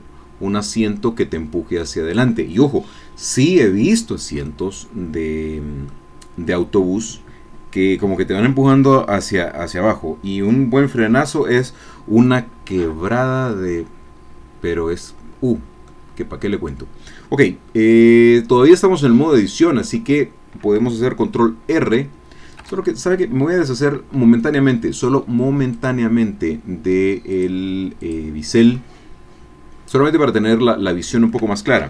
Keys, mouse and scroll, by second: 4.1 scroll down 1, 4.5-8.1 drag, 13.1 click, 13.7 middle click, 14.2 scroll down 1, 14.5 middle click, 14.7-15.0 scroll up 1, 15.0 middle click, 15.2 scroll down 1, 15.9 click, 16.7-18.5 middle drag, 18.5 scroll down 2, 18.7 middle click, 18.8-20.1 drag, 20.1 middle click, 21.8 ctrl+r, 22.6 Escape, 25.7-27.6 drag, 28.0 click, 28.7-30.5 middle drag, 30.5 scroll up 1, 31.1 shift+middle click.